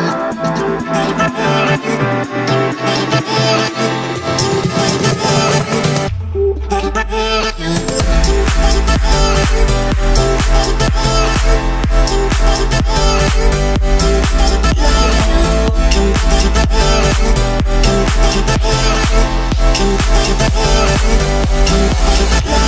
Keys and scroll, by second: 1.4 Escape, 2.4 Escape, 4.1 1, 4.2 0, 4.6 Return, 14.6 Escape, 15.1 m, 16.6 Escape, 17.9 Escape.